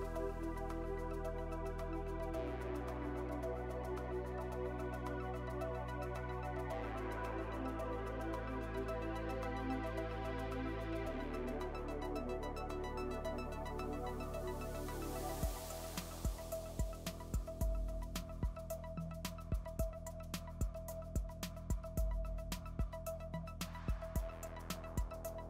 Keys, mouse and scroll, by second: 0.3 ctrl+r, 1.1 KP_1, 1.9 g, 4.4 click, 5.4 g, 7.5 click, 9.4 click, 10.4 s, 12.4 click, 14.5 shift+click, 15.5 s, 17.0-18.0 middle drag, 19.0 ctrl+r, 21.5-22.5 middle drag, 22.5 ctrl+r, 24.4 Tab, 24.5 click.